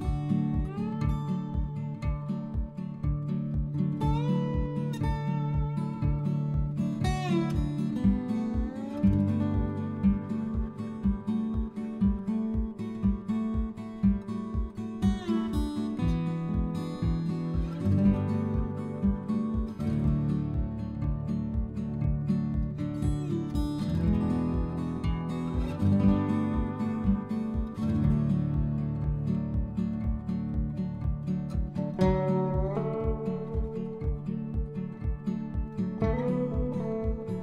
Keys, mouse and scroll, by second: 4.3 click, 6.8 middle click, 9.8 click, 11.2 click, 14.4 middle click, 16.8 middle click, 19.8 click, 22.2 click, 22.4 Tab, 22.5 click, 22.6 middle click, 22.8 click, 23.1 click, 23.2 Tab, 23.4-30.0 typing, 23.7 click, 24.4 click, 24.8 click, 25.4 click, 25.7 click, 25.8 click, 25.9 middle click, 26.1 click, 26.3 click, 26.6 click, 26.8 click, 26.9 middle click, 27.7 click, 27.8 middle click, 28.2 click, 28.5 click, 28.6 click, 29.0 click, 29.0 middle click, 29.6 click, 29.7 middle click, 30.4 click, 30.5 middle click, 30.7 Tab, 31.8 middle click, 32.3 click, 32.5 click, 33.3 click, 33.8 click, 33.9 click, 35.0 middle click, 35.7 click, 35.8 middle click, 36.0 click, 36.1 middle click, 36.2 middle click, 36.6 F12, 36.9 click.